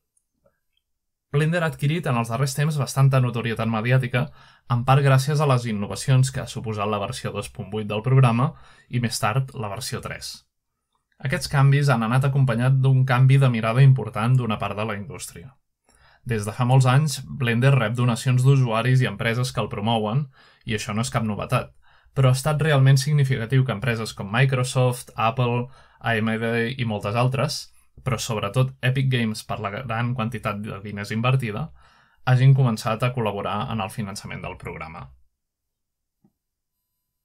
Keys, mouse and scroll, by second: 0.5-1.6 scroll down 2, 1.6-3.7 scroll down 4, 3.7-8.3 scroll up 2, 9.7-12.3 scroll up 1, 12.3-13.1 scroll up 1, 13.1-14.8 scroll up 1, 14.8-20.4 scroll down 9, 21.2-23.8 scroll down 1, 24.0-25.6 drag, 25.1-26.3 scroll down 4, 27.1 ctrl+Tab, 28.4-29.4 scroll down 1, 34.0-34.6 scroll down 1, 35.5-36.1 scroll down 1.